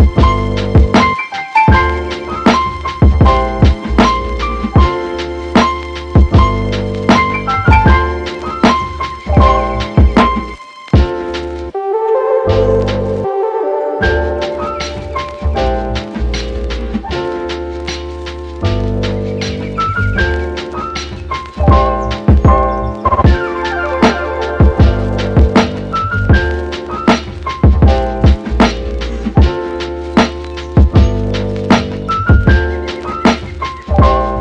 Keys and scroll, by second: 13.1 super+z.